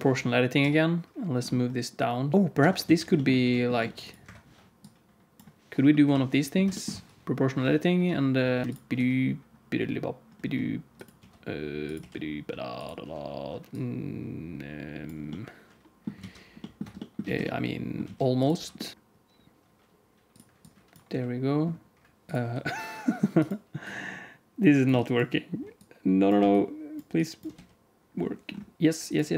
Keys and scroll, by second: 0.5 g, 2.5 Tab, 2.8 alt+z, 3.3 ctrl+r, 5.9 KP_7, 7.9 r, 8.6 q, 8.9 g, 11.1 r, 12.7 g, 16.1 alt+z, 16.7 Tab, 17.1 alt+z, 18.0 alt+z, 18.5 h, 18.9 r, 21.0 g, 22.3 r, 27.4 g.